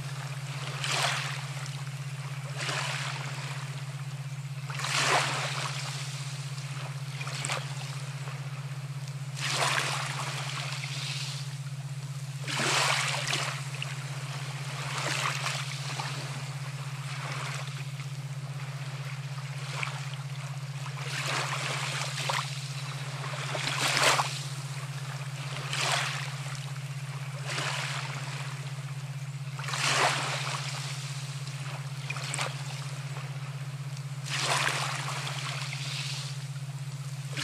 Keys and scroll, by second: 9.2-10.0 typing, 18.6 ctrl+z, 25.1 ctrl+z.